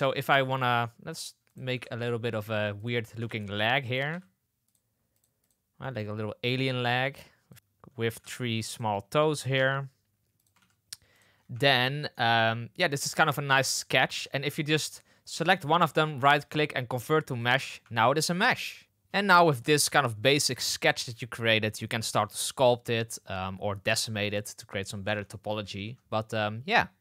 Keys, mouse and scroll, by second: 0.5 drag, 1.0 g, 1.6 shift+s, 3.2 shift+d, 4.0 s, 5.1 click, 5.4 click, 5.8 drag, 6.8 shift+d, 7.5 ctrl+z, 7.5 shift+d, 8.1 d, 8.1 s, 9.5 shift+d, 10.5 shift+d, 11.4 Tab, 11.7 middle click, 12.1 Tab, 12.8-13.2 middle drag, 14.0 Tab, 14.8 Tab, 17.8 Tab, 25.0 Tab, 25.8 Tab.